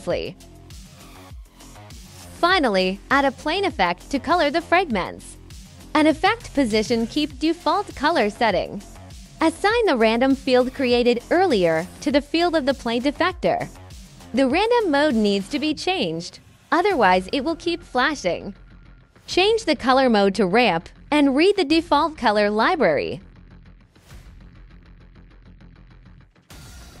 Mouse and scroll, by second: 1.3 right click, 1.7 click, 2.6 click, 3.6 click, 4.8 click, 5.9 click, 6.6 click, 7.4 click, 7.9 click, 8.6 click, 9.5 click, 11.9 click, 13.6 click, 18.0 click, 18.6 click, 19.4 click, 21.1 click, 21.9 scroll up 1, 23.2 click, 23.4 click, 24.0 click, 24.1 right click, 24.2 click, 24.6 click, 26.2 click, 26.9 click.